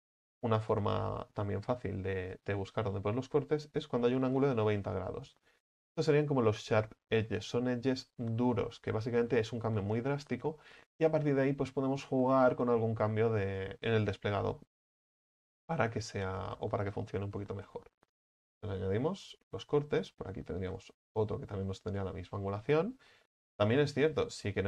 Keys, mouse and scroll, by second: 0.1-2.1 shift+middle drag, 2.1-2.6 scroll up 1, 2.6 right click, 3.6 alt+shift+right click, 3.9 alt+shift+right click, 5.7 alt+shift+right click, 18.5 u, 18.8-19.3 scroll down 3, 19.3 middle click, 20.2-20.8 scroll up 4, 20.8 right click, 21.4 right click, 21.8 alt+shift+right click, 22.0 alt+shift+right click, 23.3-24.0 middle drag, 24.0 ctrl+z, 24.2 ctrl+z, 24.4 ctrl+z.